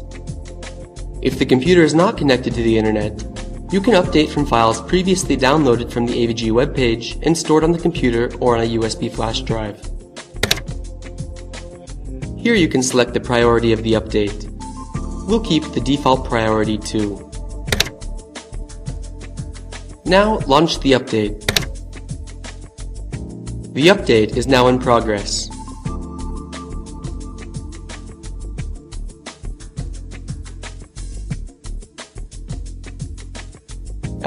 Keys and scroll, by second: 7.9 Return, 15.5 Return, 19.6 Return.